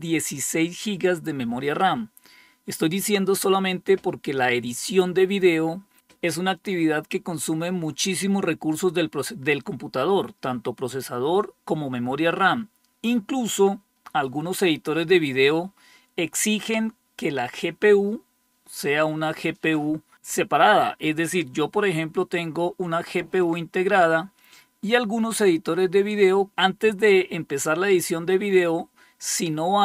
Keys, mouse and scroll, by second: 23.3-26.5 drag.